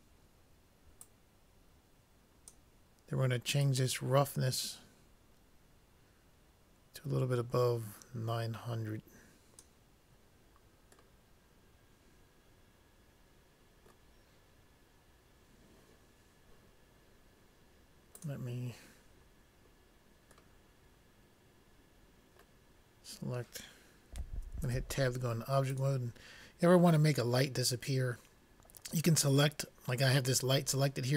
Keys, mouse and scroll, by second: 1.4-2.9 drag, 4.0-5.5 drag, 19.2 middle click, 21.1-22.1 middle drag, 24.9 Tab, 26.1-27.6 drag.